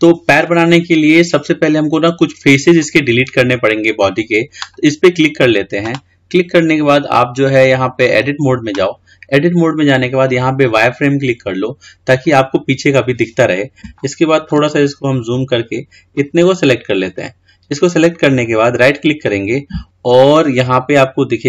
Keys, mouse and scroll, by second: 4.8 click, 7.1-10.2 drag, 12.1 click, 13.2-14.2 scroll up 4, 14.2 shift+middle click, 14.9-15.5 scroll up 4, 15.5-16.4 scroll down 1, 16.4 click.